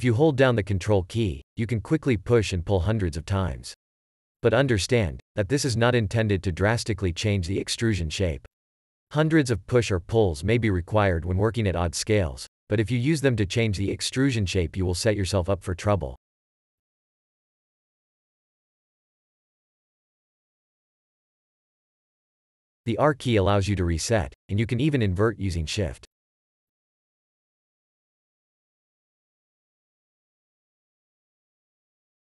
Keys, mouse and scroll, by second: 0.9 ctrl+q, 1.6 ctrl+q, 2.2 ctrl+q, 11.9 e, 17.8 ctrl+e, 18.5-18.9 ctrl+e, 25.3 r, 30.1 w.